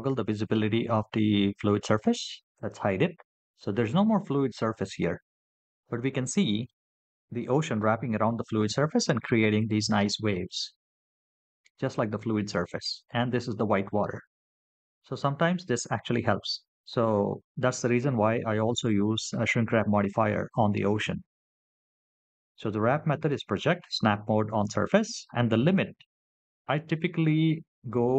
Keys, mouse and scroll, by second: 2.4 click, 5.7-6.5 middle drag, 9.0-9.8 middle drag.